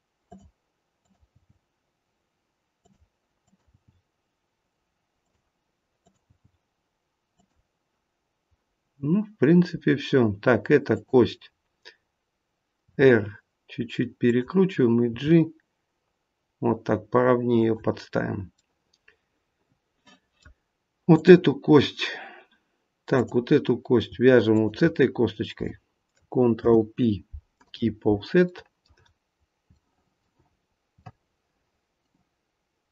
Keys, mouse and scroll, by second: 1.0 click, 1.4 g, 3.4 click, 4.0 g, 6.0 click, 7.0 g, 8.7 scroll down 1, 9.4-10.1 scroll down 1, 10.8 click, 12.8 r, 15.1 g, 18.5 middle click, 21.0 click, 23.0 click, 24.4 shift+click, 26.5 ctrl+p, 28.4 middle click, 29.6 shift+middle click, 30.4-30.7 scroll up 3, 31.0 middle click.